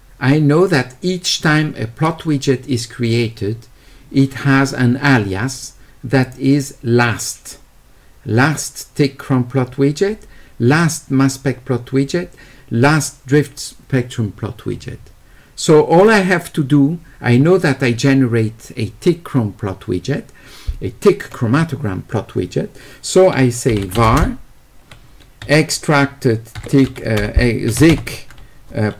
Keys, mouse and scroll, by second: 6.3 click, 16.0 click, 23.8 q, 24.1 space.